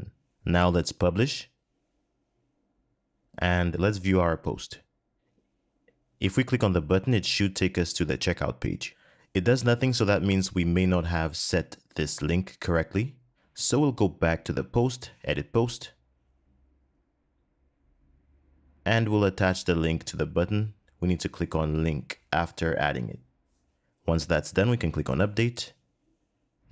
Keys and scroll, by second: 21.3 super+v.